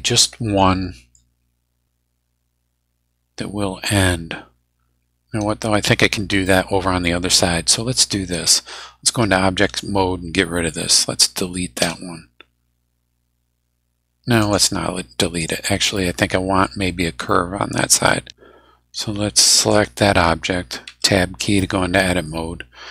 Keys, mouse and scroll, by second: 6.4 middle click, 9.1 Tab, 9.6 right click, 11.8 Delete, 14.4 click, 15.4 click, 15.9 middle click, 17.2 middle click, 18.1 scroll up 1, 19.5 click, 20.9 Tab, 21.6 middle click.